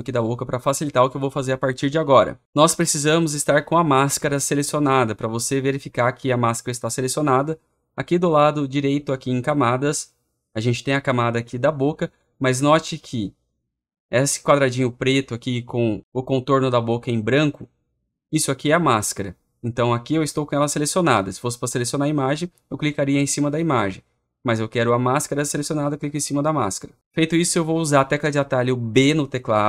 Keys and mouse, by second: 0.0 click, 0.2 click, 0.3 click.